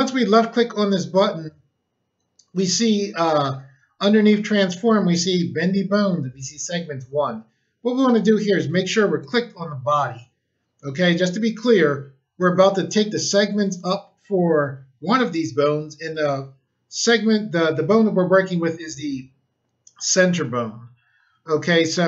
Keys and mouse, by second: 9.1 click.